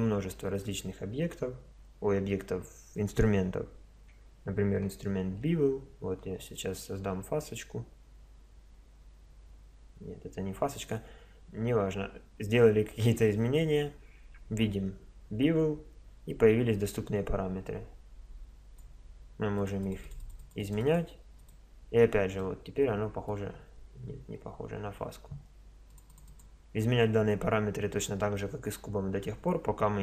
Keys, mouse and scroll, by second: 3.9 Tab, 5.3 ctrl+b, 16.3-18.2 drag, 19.6 click, 22.4-25.2 middle drag, 27.9 click.